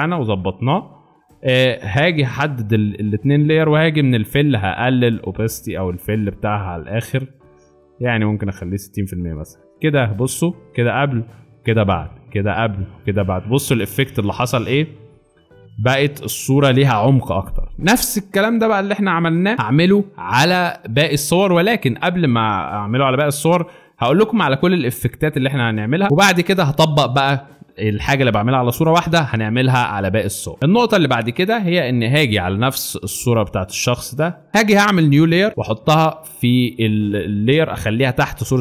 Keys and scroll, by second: 0.6 space, 1.8 shift+space, 18.2 z, 20.6 space, 21.4 z, 26.0 space, 30.6 space.